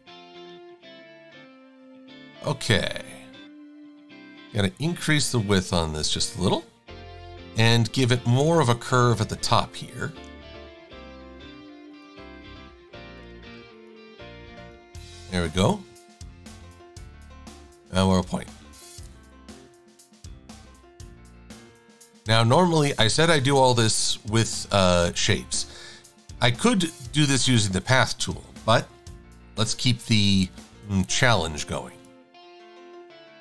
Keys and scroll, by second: 4.5 v, 7.4 shift+c, 11.0 a, 13.5 shift+c, 28.6 super+=.